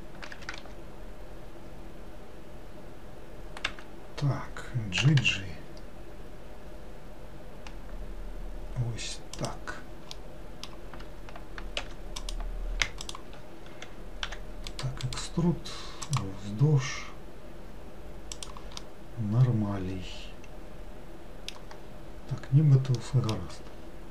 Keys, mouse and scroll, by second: 0.4 g, 5.1 g, 10.2-11.9 middle drag, 11.9 3, 12.3 click, 13.1 shift+click, 14.3 e, 15.1-18.1 right drag, 18.9-22.0 middle drag, 22.0-23.1 scroll down 1, 23.1 middle click, 23.8-24.1 scroll up 2.